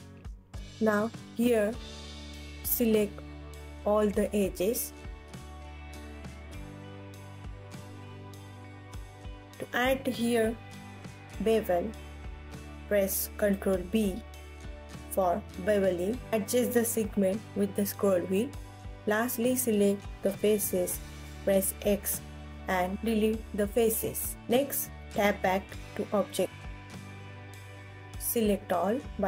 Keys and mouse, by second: 1.8 click, 3.2 alt+z, 4.0 click, 5.8-7.3 alt+middle drag, 7.3-9.1 alt+drag, 9.1 alt+middle click, 9.9 alt+click, 10.6 ctrl+s, 11.8 alt+click, 12.3 alt+middle click, 12.3 alt+click, 12.5 alt+middle click, 12.7 alt+click, 13.5 ctrl+b, 18.9 click, 20.8 x, 23.2 KP_1, 24.3 alt+z, 25.4 ctrl+s, 25.4 Tab, 25.7 Tab, 26.7 Tab, 27.3 a.